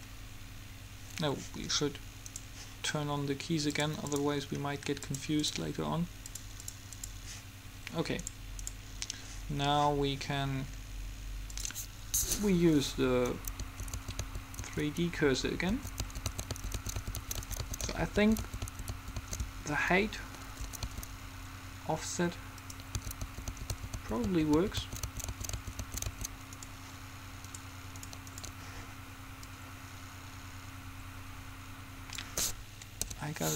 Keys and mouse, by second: 0.9-2.4 middle drag, 2.4-4.2 right drag, 3.9-8.4 drag, 4.2 middle click, 9.0-10.4 right drag, 10.7-11.7 middle drag, 11.7-13.3 drag, 13.8 Right, 19.6 Left, 21.0 Right, 22.9-24.4 drag, 29.6-31.2 middle drag, 33.2 n.